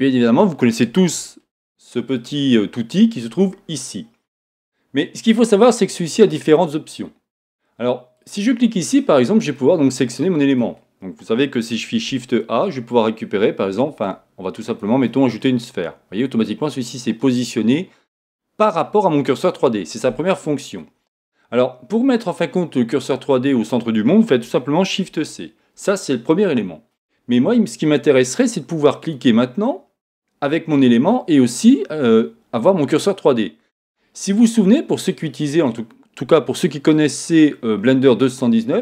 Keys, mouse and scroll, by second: 1.2-5.3 scroll down 2, 5.3-8.1 middle drag, 8.1 click, 8.8-12.1 middle drag, 12.1 shift+a, 15.7 scroll down 2, 15.7-29.0 middle drag, 21.3-22.0 scroll up 2, 22.0 scroll up 1, 22.1-25.0 scroll down 2, 25.0 shift+c, 26.3-26.6 scroll up 1, 29.0 click.